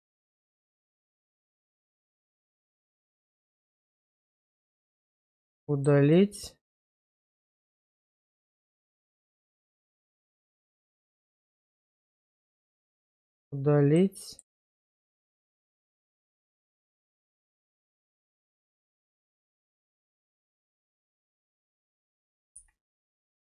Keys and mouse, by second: 1.5 x, 2.9 shift+middle click, 3.9-5.5 middle drag, 5.7 shift+middle click, 6.1 middle click, 8.1 alt+click, 8.7 middle click, 11.8 x, 12.9 shift+middle click, 13.4 middle click, 15.1 middle click, 17.1 x, 18.1 middle click, 18.5 middle click, 19.8 middle click, 22.5 x.